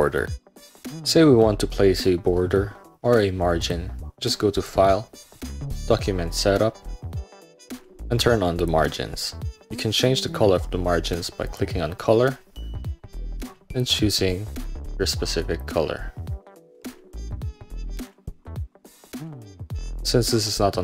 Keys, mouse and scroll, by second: 3.7 click, 4.6-5.9 drag, 8.7 scroll down 1, 11.6 scroll down 1, 13.8 scroll down 1, 14.7 scroll down 1, 15.5 scroll down 1, 16.4 middle click, 16.7-18.2 scroll up 1, 18.2-19.0 scroll down 1, 19.0-19.6 scroll down 1, 20.5 middle click.